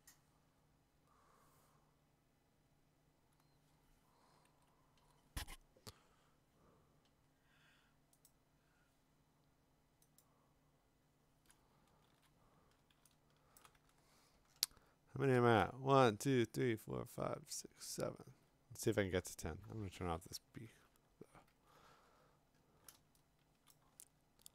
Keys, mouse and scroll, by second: 1.2 click, 4.3 click, 4.5 ctrl+z, 8.3 click, 10.2 click, 12.1-13.6 ctrl+z, 13.6 click, 13.7 click, 13.9-15.3 scroll, 16.8 middle click, 18.3 alt+Tab, 19.0 alt+Tab, 19.3 alt+Tab, 19.3 scroll, 20.1 ctrl+w, 20.1 scroll down 6, 20.7 alt+Tab, 21.3 alt+Tab, 21.5 alt+Tab, 22.1-22.7 scroll, 23.7 click, 24.0-24.5 scroll.